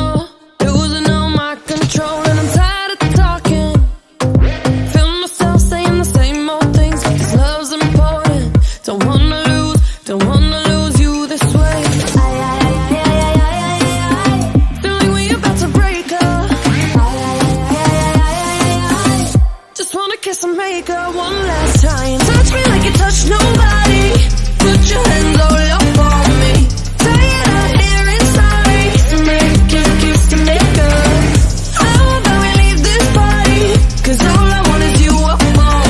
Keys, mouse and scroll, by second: 0.8 scroll up 3, 0.9-1.9 middle drag, 1.9 click, 2.4-3.4 drag, 3.4 scroll up 4, 3.5 middle click, 3.6 scroll down 2, 3.8-5.5 drag, 5.5-6.3 middle drag, 6.3-6.8 scroll down 1, 6.8 drag, 7.2 click, 8.7-10.4 middle drag, 10.4 click, 10.6 scroll down 4, 10.7 scroll up 6, 10.8 middle drag, 11.5 KP_Decimal, 12.2 click, 12.4 scroll up 1, 12.5 middle click, 13.1-14.6 drag, 14.9-16.0 drag, 18.8 click, 19.0 scroll down 2, 19.0-19.4 scroll up 5, 22.2-27.3 drag, 29.1 middle click, 30.0 drag, 30.3 ctrl+t, 31.6 click, 32.5-34.0 drag, 34.0-34.7 scroll up 2, 34.7-35.6 middle drag.